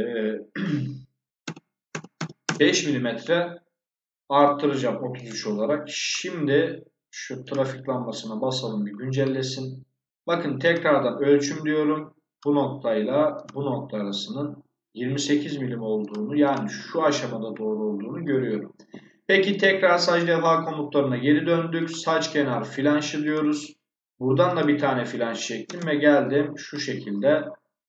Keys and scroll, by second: 0.5 2, 2.0 5, 2.3 Return, 25.5 space.